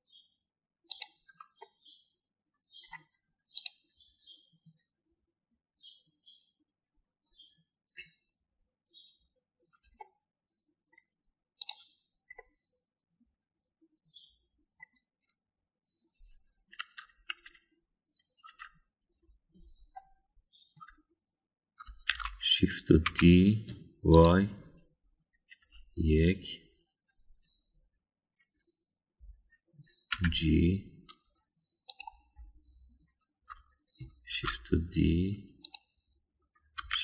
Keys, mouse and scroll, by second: 2.6-3.8 middle drag, 4.6 click, 10.9-11.9 middle drag, 13.4-15.9 middle drag, 17.8 KP_1, 18.3 KP_3, 19.4 KP_1, 20.9 middle click, 23.1 shift+d, 26.6 KP_1, 31.1 g, 35.3 shift+d.